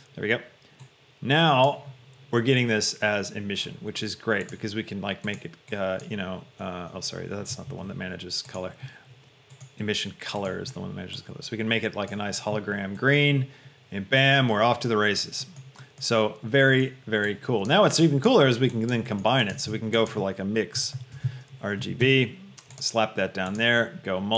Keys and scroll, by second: 8.0 ctrl+z, 19.7 shift+a, 20.9 m, 21.3 x, 21.9 Down, 22.3 Return.